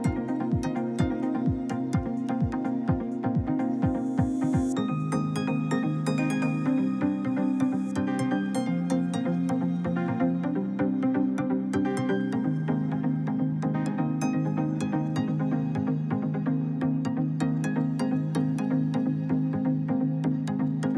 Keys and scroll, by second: 3.5 1, 4.1 Return, 6.6 Escape, 8.5 1, 8.7 0, 9.0 Return.